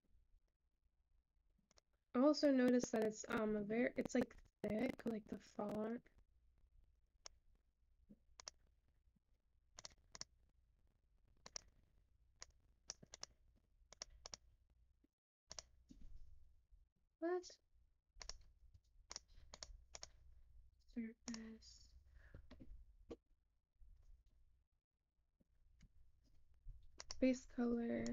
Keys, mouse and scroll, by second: 10.9-27.6 drag.